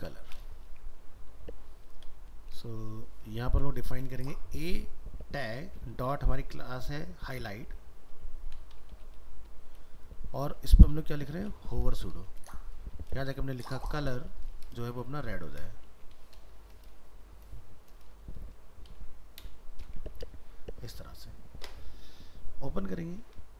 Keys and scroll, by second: 1.0 ctrl+s, 20.1 ctrl+s.